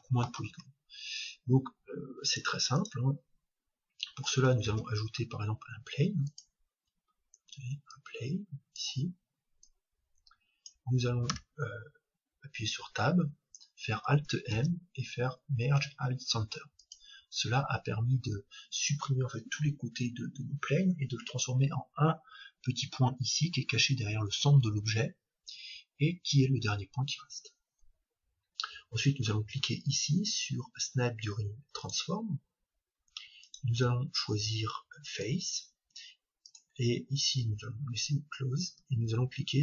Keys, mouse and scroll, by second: 0.5 Tab, 2.3-4.2 drag, 3.8-5.7 middle drag, 4.7 shift+a, 7.9-11.6 drag, 11.3 Tab, 14.5 alt+m, 22.1-24.2 middle drag, 24.7-25.8 scroll down 1, 25.8-27.4 scroll down 1, 27.4 scroll down 1, 27.7-28.6 scroll up 1, 31.8-35.3 drag, 36.4-38.4 drag.